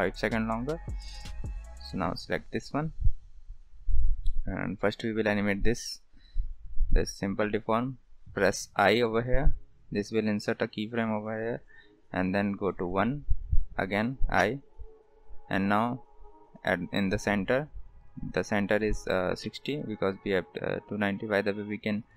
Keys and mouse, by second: 4.2 click, 9.3 i, 11.0-13.0 drag, 14.4 i, 15.8-17.5 drag, 19.8-21.0 drag.